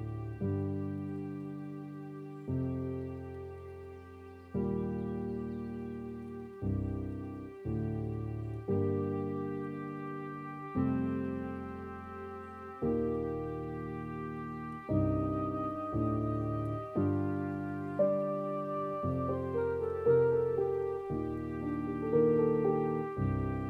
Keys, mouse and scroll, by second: 0.8 middle click, 1.6 click, 2.2 middle click, 2.6-3.1 scroll down 5, 3.1 middle click, 3.5-4.0 scroll up 7, 4.0-5.2 middle drag, 5.2 scroll down 2, 6.0-7.0 middle drag, 7.0 scroll down 3, 7.2-8.3 middle drag, 8.3-9.4 drag, 9.4 scroll up 1, 9.4-11.0 middle drag, 11.0-11.7 scroll up 7, 11.9-12.6 scroll down 7, 13.4-15.2 middle drag, 15.2-17.8 scroll down 1, 17.8-18.4 scroll down 1, 18.4 scroll down 1, 20.1 click, 21.3 click, 23.3 ctrl+shift+t.